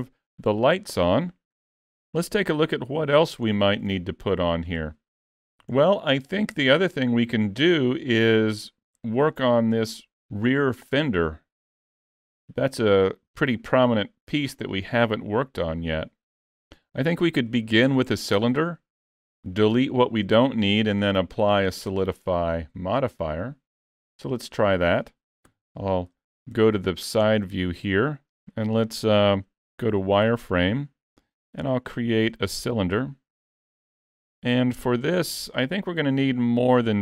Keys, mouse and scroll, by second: 3.5-4.0 scroll down 4, 4.0 shift+middle click, 5.8 shift+middle click, 6.4 scroll up 2, 6.6 shift+middle click, 7.5-7.8 scroll up 2, 7.9 shift+middle click, 11.5 scroll up 2, 11.7 shift+middle click, 14.9-15.4 scroll up 3, 15.4 middle click, 17.8 shift+middle click, 18.8-19.2 scroll up 1, 25.5 KP_3, 26.8 shift+middle click, 27.5 scroll up 1, 28.3 scroll down 2, 30.0 z, 31.5 shift+a.